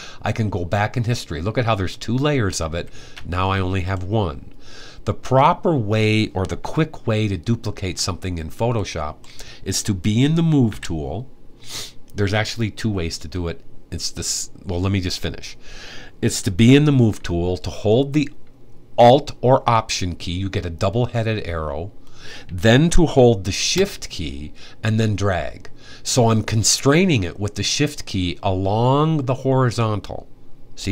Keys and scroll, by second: 2.4 alt+super+z, 3.1 alt+super+z, 10.4 v.